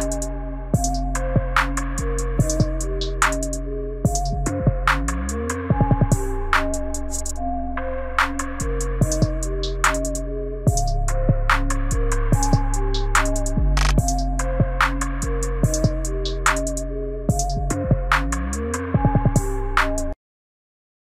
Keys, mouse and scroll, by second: 0.2 right click, 3.4 space.